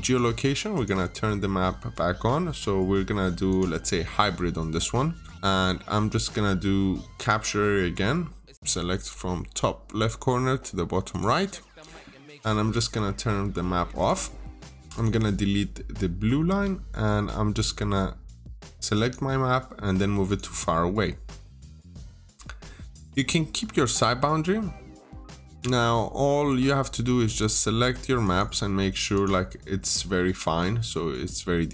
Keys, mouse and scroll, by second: 16.3 Delete, 17.4 click, 21.1 Escape, 21.6 scroll up 1, 22.2 middle click, 23.0-23.4 scroll down 1, 23.4-23.9 scroll up 1, 23.9-24.4 scroll down 1, 25.0 middle click, 25.4 scroll down 1, 26.2-27.2 scroll up 1, 27.2 click, 30.9 scroll down 1, 31.1 middle click.